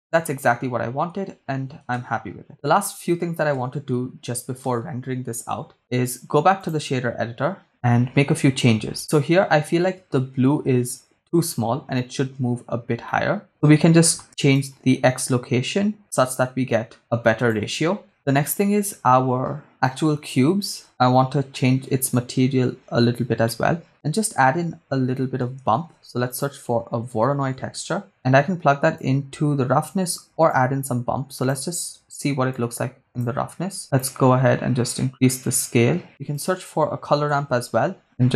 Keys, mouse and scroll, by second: 2.1 shift+space, 3.7 shift+space, 5.0 shift+space, 5.8 right click, 6.7-7.7 drag, 13.1 middle click, 14.5-17.7 shift+drag, 19.7 right click, 21.1-21.5 scroll down 3, 21.5 middle click, 23.1 scroll up 1, 23.4 middle click, 25.9 shift+a, 29.0 click, 30.5-31.9 drag, 32.7 click, 33.8 middle click, 33.8-34.2 scroll up 3, 34.3-36.1 shift+drag, 36.1 middle click, 36.1 shift+a.